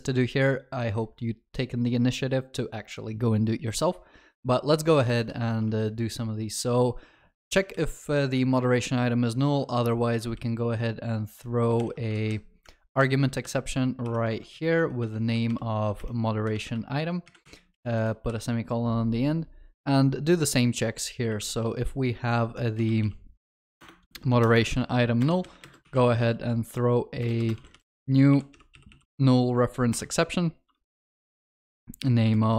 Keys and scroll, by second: 12.2 ctrl+c, 14.5 ctrl+v, 15.5 ctrl+BackSpace, 23.8 Return, 30.0 Return.